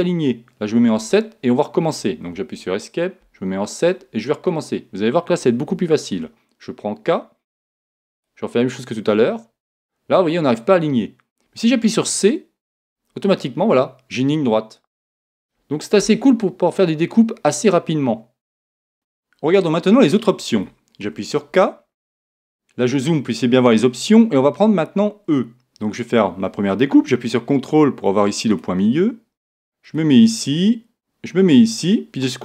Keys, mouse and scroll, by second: 3.2 KP_1, 6.1 k, 17.5-18.9 middle drag, 21.0 k.